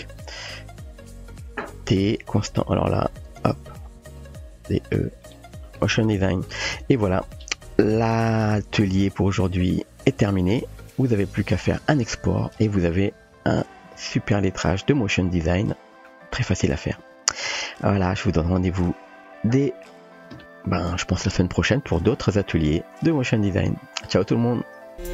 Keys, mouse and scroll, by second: 0.8 a, 1.6 t, 3.3 space, 6.7 ctrl+space.